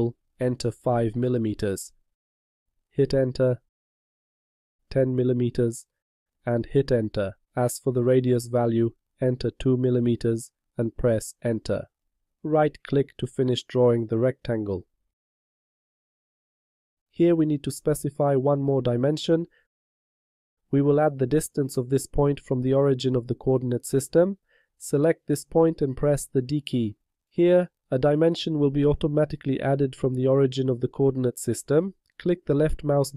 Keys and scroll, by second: 2.5 5, 8.9 2, 26.3 d.